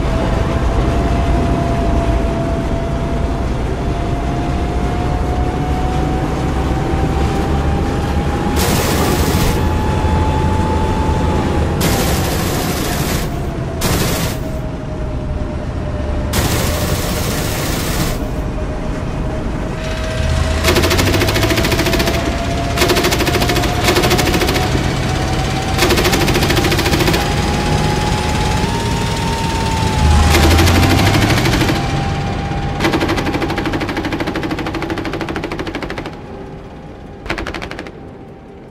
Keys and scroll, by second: 0.3 d, 6.1 w, 14.7 d, 15.1 w, 20.0 w, 29.8 w, 35.9 a.